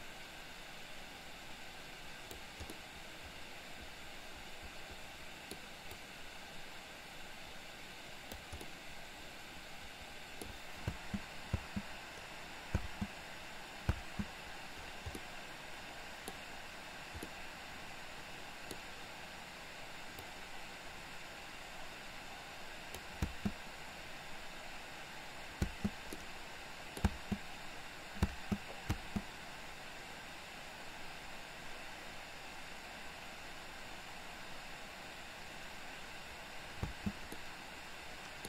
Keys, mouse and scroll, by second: 2.7-5.6 middle drag, 6.1-8.4 drag, 8.6-10.6 middle drag, 11.1 space, 11.6 space, 13.9 space, 15.2-16.3 middle drag, 16.3 scroll down 1, 17.3-18.8 middle drag, 20.3-23.1 drag, 23.3 space, 25.6 space, 26.3-27.1 middle drag, 27.1 space, 28.3 space, 28.9 space, 36.8 space, 37.4-38.4 middle drag.